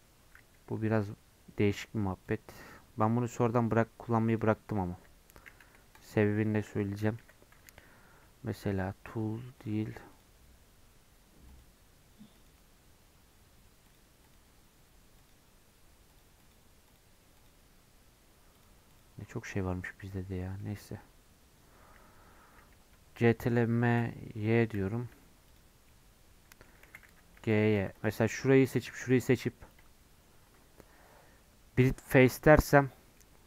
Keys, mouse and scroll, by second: 4.9 a, 5.6 3, 5.9 click, 6.2-7.2 middle drag, 7.2 l, 8.7-20.6 drag, 20.6-23.8 middle drag, 23.8 ctrl+m, 25.9-26.9 middle drag, 26.9 g, 27.7 3, 27.9 click, 28.2 middle click, 28.6 shift+click, 28.9 middle click, 29.7-33.1 right drag, 33.1-33.4 middle drag.